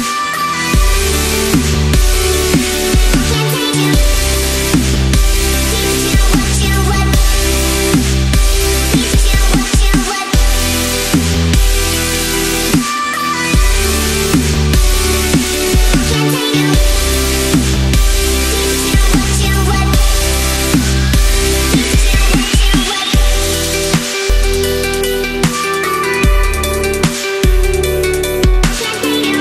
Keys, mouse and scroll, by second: 3.8 ctrl+a, 4.8 click, 6.1 ctrl+=, 6.5 space, 6.6 click, 6.8 space, 7.7 click, 8.3 shift+click, 9.5 click, 11.9-12.4 space, 13.9-16.4 drag, 20.4-21.3 drag, 24.1-25.3 drag, 29.2-29.4 drag.